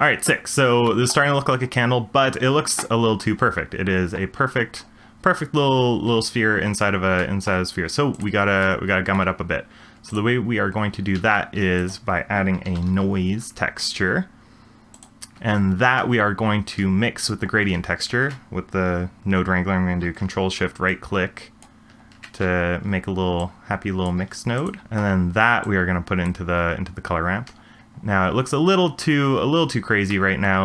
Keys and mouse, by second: 0.9 shift+drag, 8.8 shift+click, 10.1 click, 11.1 shift+a, 21.0-21.7 ctrl+shift+drag, 23.4-24.1 drag, 24.2 g, 24.8 shift+middle click, 25.6 click, 25.7 click.